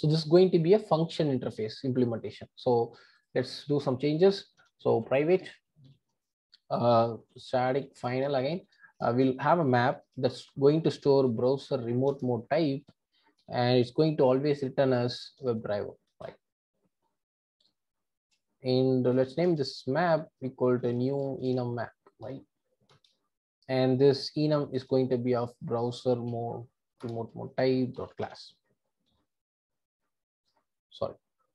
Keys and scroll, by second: 12.1 Return, 16.1 Return, 22.9 Return, 27.0 Return.